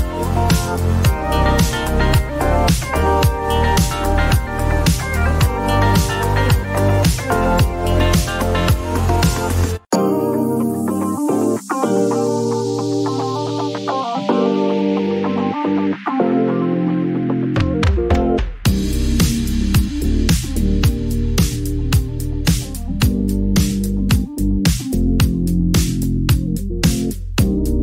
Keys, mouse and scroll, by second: 0.9 click, 3.7 click, 4.9-6.0 typing, 7.8 click, 7.9 click, 11.8 click, 12.7 typing, 13.3 Return, 15.7 click, 16.2-16.6 typing, 16.9 Return, 19.1 click, 21.4 click.